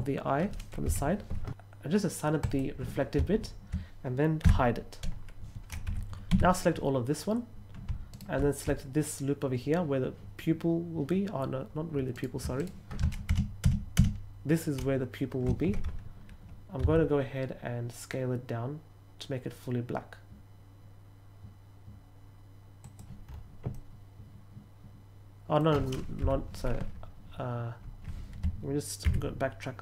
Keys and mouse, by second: 2.3 click, 6.2 a, 12.0 right click, 12.5 right click, 16.7 s, 22.7 click, 23.6-25.5 middle drag.